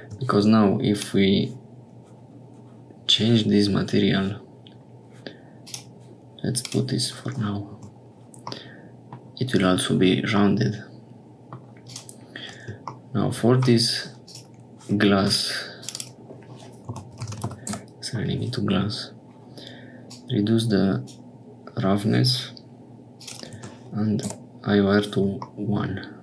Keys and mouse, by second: 5.6 click, 6.6 click, 7.7 Tab, 8.5 middle click, 9.1 click, 10.4-11.5 drag, 11.8 click, 14.2 click, 15.2 click, 15.8 click, 15.9-18.2 drag, 17.4 s, 20.0-21.1 drag, 23.1-24.9 drag, 25.5-26.2 middle drag.